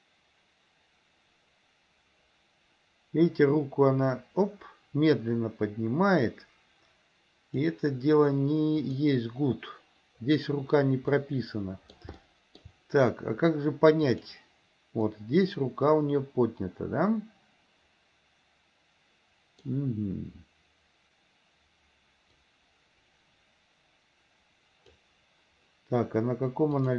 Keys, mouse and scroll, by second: 8.9 click, 11.2-12.2 middle drag, 12.3-12.8 shift+middle drag, 14.2 click, 15.2-19.9 middle drag, 22.6-25.2 drag.